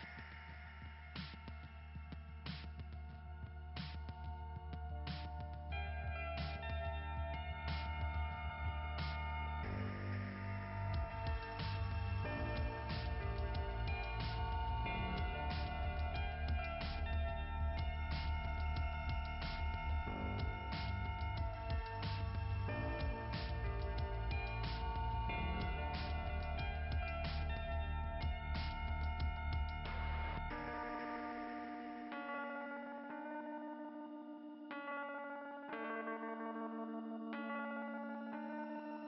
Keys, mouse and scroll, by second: 3.7-4.1 scroll down 2, 6.5 click, 10.6 click, 10.9-11.4 scroll up 2, 15.6 click, 18.0 click, 18.6 click, 20.7 click, 21.5 click, 25.3 click, 31.8 click, 34.0 click, 36.7-37.3 scroll down 1, 38.0 click.